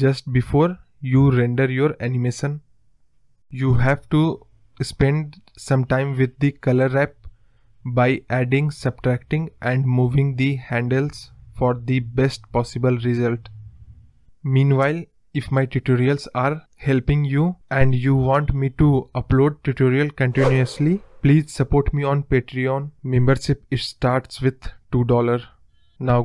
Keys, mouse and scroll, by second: 1.5-3.3 drag, 5.8 space, 6.4 click, 9.0 click, 9.2-9.8 scroll down 11, 10.1-10.8 drag, 11.0-13.0 drag, 14.1 click, 15.7 space, 16.4 space, 17.1-18.6 drag, 19.6-20.9 drag, 21.1-22.6 drag.